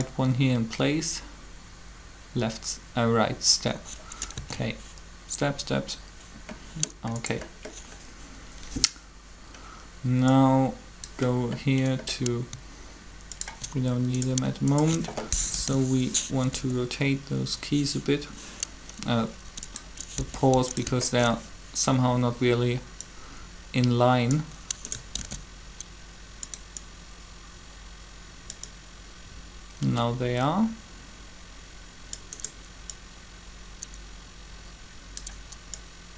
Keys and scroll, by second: 4.4 alt+a, 15.5 shift+7, 16.5 r, 20.2 r, 25.2 shift+d.